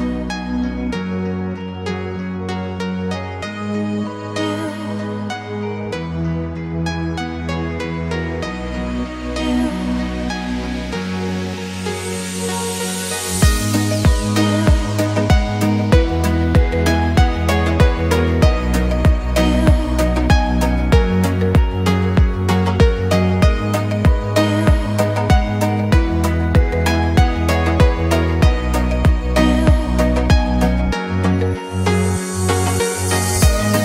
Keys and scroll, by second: 2.2 Escape, 13.1 6, 13.4 0, 14.4 Return, 16.9 Escape, 32.5 Escape.